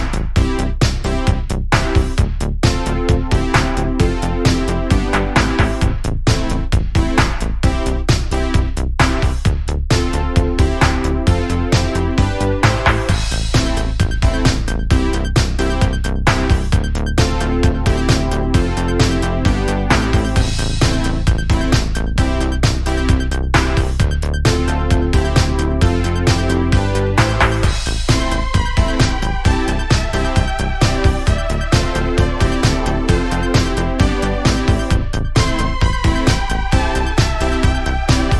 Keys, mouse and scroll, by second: 0.8 click, 1.1 g, 2.5 click, 2.7 g, 3.4-4.4 middle drag, 4.4 click, 4.6 g, 5.5-6.5 middle drag, 6.5 scroll up 2, 6.7 middle click, 7.3 click, 7.7 middle click, 8.5 g, 9.4 scroll down 1, 9.6 middle click, 10.4 Tab, 10.6 scroll down 1, 10.9-12.0 middle drag, 12.0 KP_Decimal, 12.6-14.4 middle drag, 15.5-17.7 middle drag, 17.7-18.1 scroll up 2, 18.1-18.8 middle drag, 18.8-19.2 scroll down 1, 19.2-20.0 scroll up 2, 20.0-21.1 middle drag, 21.1 scroll down 2, 21.4-22.7 middle drag, 22.7 scroll up 1, 23.2 Tab, 23.4 scroll up 2, 24.7 click, 26.9 click, 27.2 middle click, 28.2 ctrl+b, 30.4-31.6 scroll up 1, 32.0 1, 32.2 click, 32.9 g, 34.4 click, 35.0 g, 36.2 click, 36.5 g, 37.9 middle click, 38.2 2.